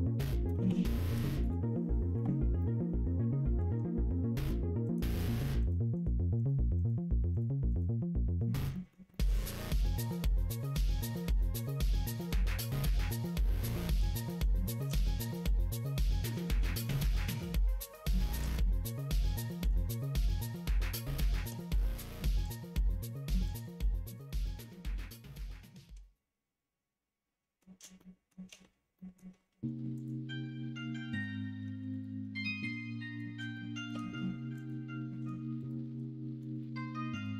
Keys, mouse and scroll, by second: 0.5 KP_0, 2.5-3.5 middle drag, 4.8 click, 5.2 click, 5.5 click, 5.9 click, 6.3 click, 6.7 click, 7.3 click, 7.6 click, 8.3 middle click, 8.7 middle click, 9.0-12.2 middle drag, 13.4 middle click, 13.8 middle click, 14.5 shift+middle click, 15.0 middle click, 15.4-16.4 middle drag, 16.7 shift+middle click, 17.0 Tab, 18.1 middle click, 18.5 middle click, 19.4 middle click, 20.8 2, 21.2 middle click, 22.8 middle click, 23.4 alt+click, 24.1 alt+click, 24.6 middle click, 25.6-27.5 middle drag, 27.9 shift+middle click, 28.9 middle click, 31.1 alt+click, 31.9 alt+click, 32.3 middle click, 33.5 shift+middle click, 34.5 alt+click, 35.5 alt+shift+click, 37.1 shift+click.